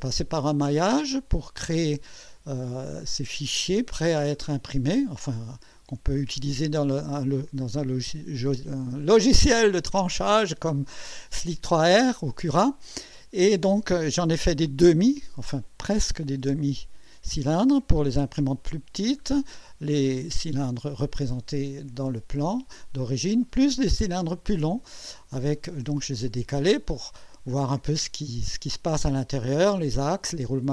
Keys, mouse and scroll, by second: 0.9 scroll up 1, 4.5 scroll down 1, 5.5-7.3 drag, 9.9-11.1 drag, 15.7 scroll up 1, 19.0 scroll down 1, 25.1 scroll up 1.